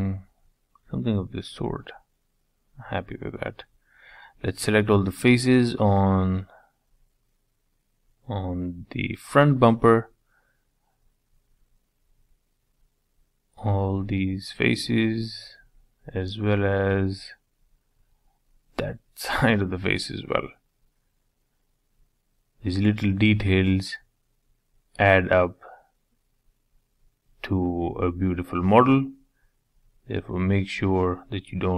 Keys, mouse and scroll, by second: 2.8 shift+click, 3.3 shift+Left, 3.9 shift+Left, 4.2 shift+Left, 4.4 middle click, 5.4 shift+Left, 6.0 shift+Left, 6.6 shift+Left, 7.0 shift+Left, 7.3 shift+Left, 8.0 shift+Left, 8.3-9.5 middle drag, 9.5 shift+Left, 9.7-10.7 middle drag, 10.7 shift+Left, 11.1 shift+Left, 11.4 shift+Left, 11.9 shift+Left, 12.5 shift+Left, 12.7 middle click, 13.4 shift+Left, 13.7 scroll down 2, 13.9-14.9 middle drag, 14.9 scroll up 3, 15.1 shift+middle click, 16.1 scroll up 4, 16.3 shift+middle click, 17.1 shift+click, 17.5-20.4 shift+middle drag, 20.4 shift+click, 20.7-21.0 scroll down 4, 21.0 middle click, 22.8 middle click, 24.1 middle click, 25.8-28.0 middle drag, 28.0 shift+click, 28.5 shift+click, 29.4 shift+click, 29.7-30.0 scroll up 2, 30.0 shift+middle click, 31.0 shift+click, 31.2 middle click.